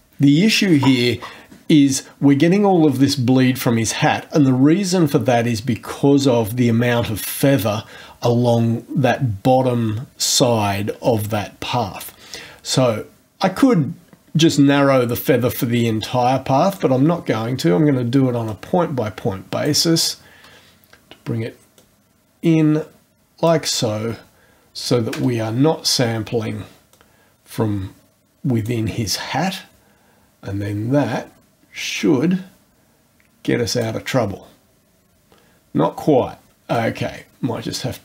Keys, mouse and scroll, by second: 15.7-17.0 drag, 18.5-19.8 drag, 21.8-23.7 drag, 26.9-28.9 drag, 32.0-34.0 drag, 36.7-38.0 drag.